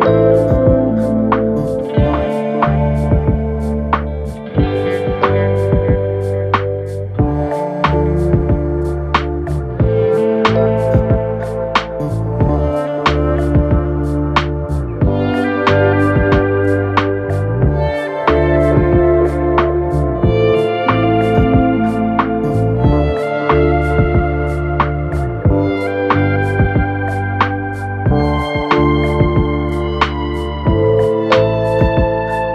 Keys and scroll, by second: 19.8 Return.